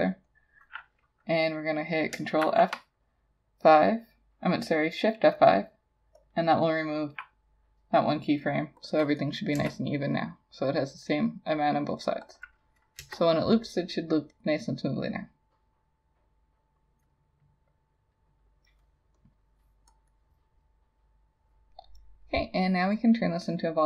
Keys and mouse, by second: 2.5 shift+F5, 6.6 double click, 9.6 Return, 12.4 double click, 13.0 Return, 20.1 double click.